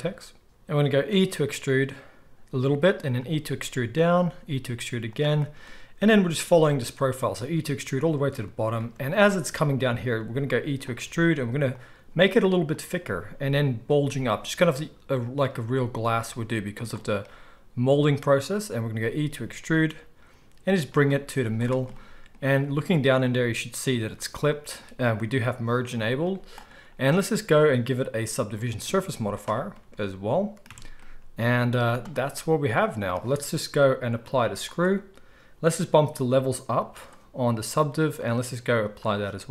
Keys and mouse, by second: 1.1 e, 3.1-27.5 middle drag, 3.1 e, 4.2 e, 6.4 e, 10.1 e, 11.0 e, 11.9 e, 12.9 e, 14.0 e, 15.6 e, 18.9 e, 21.2 z, 26.2 z, 27.5-39.5 drag, 29.0 z, 30.6 Tab, 31.7 z.